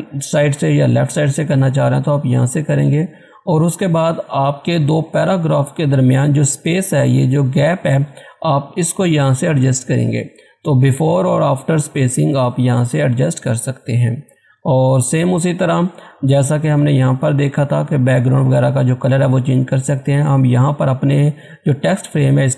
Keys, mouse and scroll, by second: 4.4 scroll down 1, 5.9 scroll up 1, 15.3 scroll down 1, 16.0-16.6 scroll up 1.